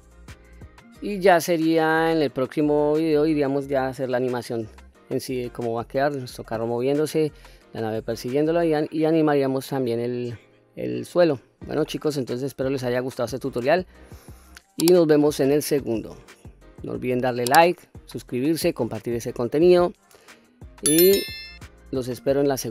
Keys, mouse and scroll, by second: 0.4-1.0 scroll down 1, 1.0-2.1 middle drag, 1.0 scroll down 1, 2.4-3.1 scroll down 1, 3.1-3.5 scroll down 2, 4.0-4.5 scroll up 2, 5.2-6.3 middle drag, 8.7 scroll down 1, 10.6-11.8 middle drag, 12.1-12.8 middle drag, 13.2-14.4 middle drag, 14.8-15.8 middle drag, 16.3 middle click, 21.6-22.7 middle drag.